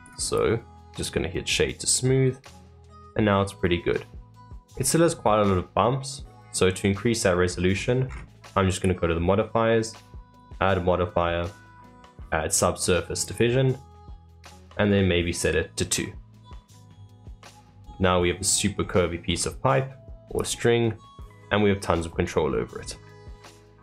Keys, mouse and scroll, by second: 2.3-4.7 middle drag, 4.7-5.0 scroll up 2, 5.0-7.7 shift+middle drag, 7.7-8.1 scroll up 9, 8.7 click, 10.1-13.3 drag, 15.3 click, 16.0-17.5 middle drag, 17.5 scroll down 3, 17.9-18.7 middle drag, 18.7 scroll up 2, 19.2-19.5 scroll down 2, 19.5-20.3 middle drag, 20.3 click, 20.8-23.8 middle drag.